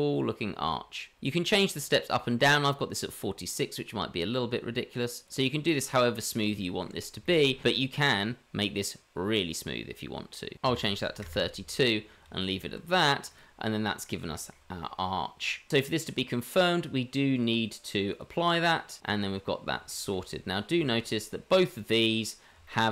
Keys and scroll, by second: 12.2 Tab.